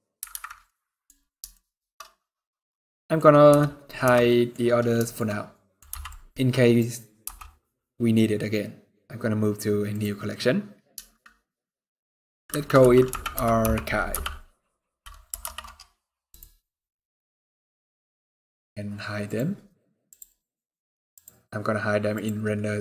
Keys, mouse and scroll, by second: 0.0 alt+a, 0.3 middle click, 0.7 scroll down 2, 1.2 shift+middle click, 1.5-1.8 shift+scroll down 3, 2.0 middle click, 2.4 scroll up 1, 2.5 scroll down 1, 2.6 middle click, 2.9 scroll up 1, 3.2 n, 3.7 n, 3.9 middle click, 4.3-4.6 scroll down 2, 4.7 shift+middle click, 5.6 b, 6.9 m, 17.7 scroll down 3, 18.9 click, 18.9 scroll down 3, 19.8 click, 20.8 click.